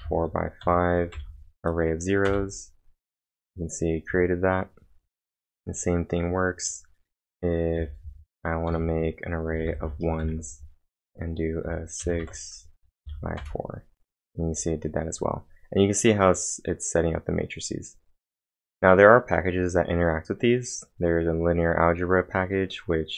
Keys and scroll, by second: 0.0-4.9 typing, 2.3 Return, 7.8-11.7 typing, 13.0 shift+0, 13.4 Return.